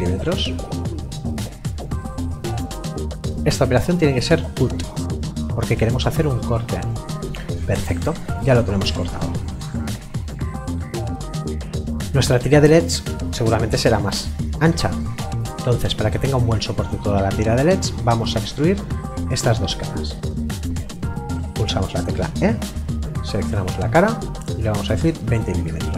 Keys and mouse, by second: 6.8 click, 10.3 middle click, 17.1 middle click, 22.1 e, 23.1 click, 24.9 KP_2.